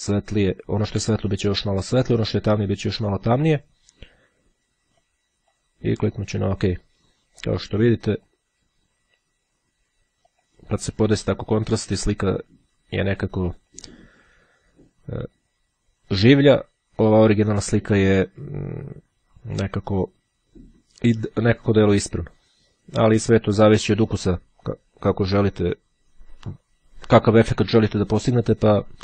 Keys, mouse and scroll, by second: 5.2-6.2 drag, 6.3 click, 7.5 click, 8.3 click, 10.4 click, 13.7 click, 14.9 click, 15.9-17.2 drag, 22.5-24.1 drag.